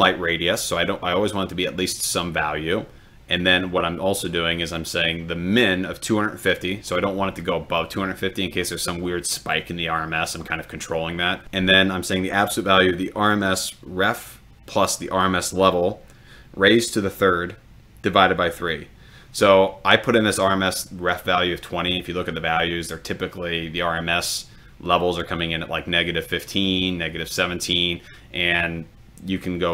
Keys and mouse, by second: 6.8 click.